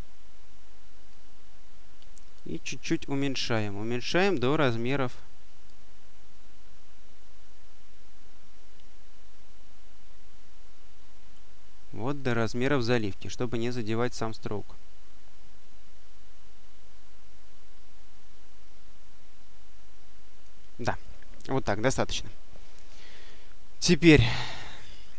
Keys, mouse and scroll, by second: 1.0-20.7 drag, 22.7 click, 24.3 click.